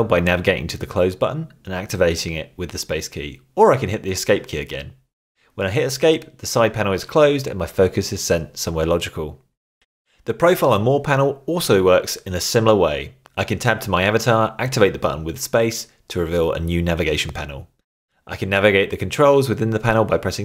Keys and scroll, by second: 5.0 Escape, 8.0 Tab, 11.2 Tab, 15.1 space.